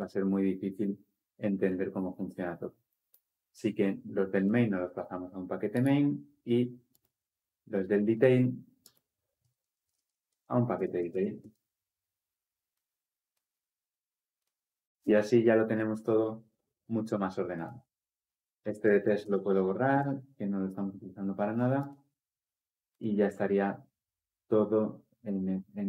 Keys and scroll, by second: 19.0 Delete.